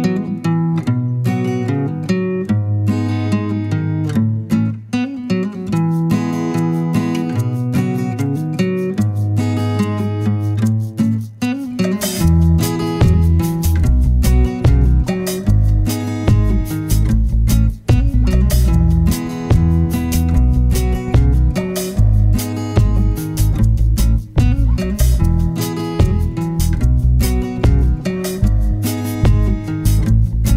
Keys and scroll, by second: 25.0-26.7 typing.